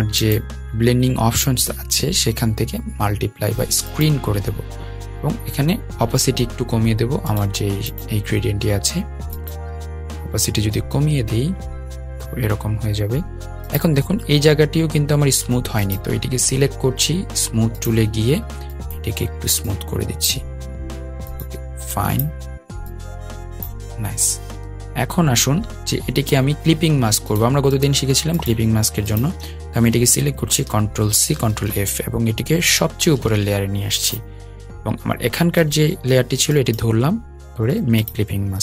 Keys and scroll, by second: 30.2 super+c, 32.2 super+f, 34.3 super+].